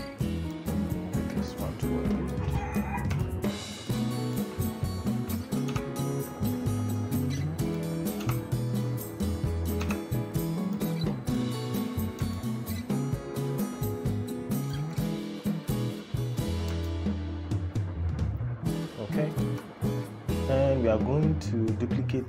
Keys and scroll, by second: 5.4 t, 9.5 e.